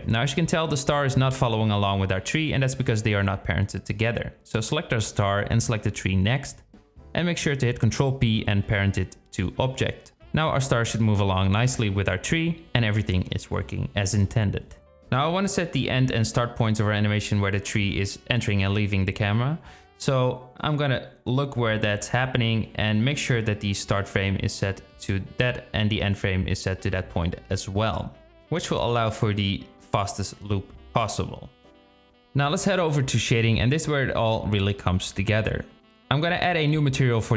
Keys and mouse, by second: 0.3-2.1 drag, 3.4 click, 4.1 click, 5.1 click, 8.0 ctrl+p, 12.3-14.5 drag, 15.4-16.9 drag, 18.3-19.5 drag, 20.2-23.8 drag, 24.6-25.7 drag, 33.5 z.